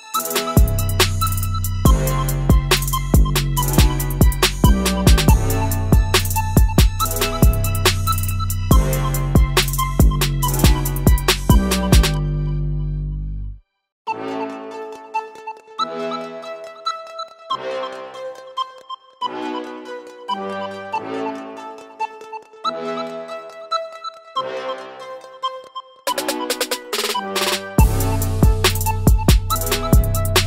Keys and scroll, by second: 0.6 ctrl+shift+v, 15.7 ctrl+z, 16.0 ctrl+z, 16.5 ctrl+z, 16.9 ctrl+z, 19.1 ctrl+z, 19.4 ctrl+z, 21.9 ctrl+z, 24.5 ctrl+z.